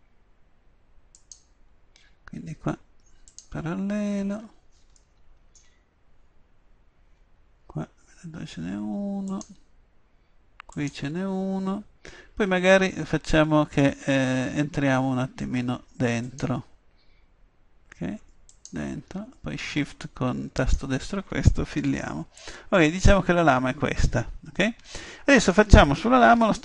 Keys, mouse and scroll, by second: 5.0-8.5 middle drag, 9.3-12.6 drag, 16.3-20.2 drag, 21.9 f, 22.6-24.6 middle drag, 26.4 KP_7.